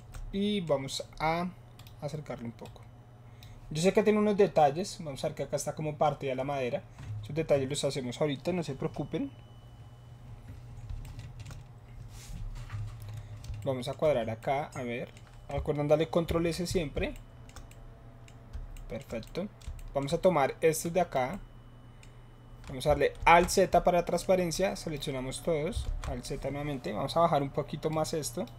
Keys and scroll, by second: 16.2 ctrl+s, 23.1 alt+z, 25.8 alt+z.